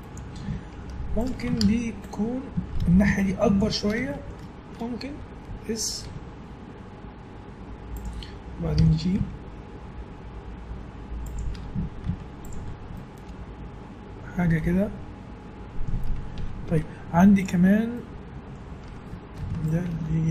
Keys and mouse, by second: 0.9 Tab, 1.6 ctrl+Tab, 2.8 a, 3.3 click, 6.0 s, 8.8 g, 11.5 Tab, 12.0 z, 13.9 middle click, 16.1 middle click, 16.3 Tab, 19.4 ctrl+r.